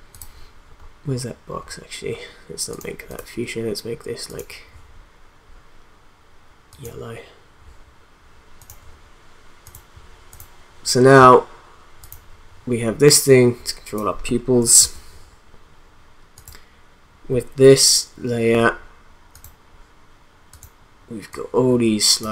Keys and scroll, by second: 14.8 ctrl+z.